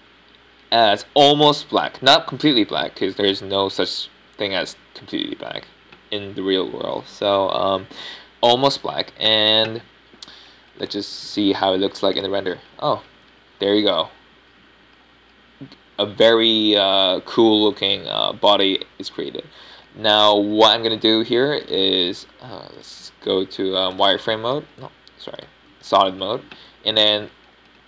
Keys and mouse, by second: 12.3-13.6 middle drag, 13.4 click, 14.2-15.3 middle drag, 22.8 Tab, 23.3 Tab, 23.7-24.7 drag.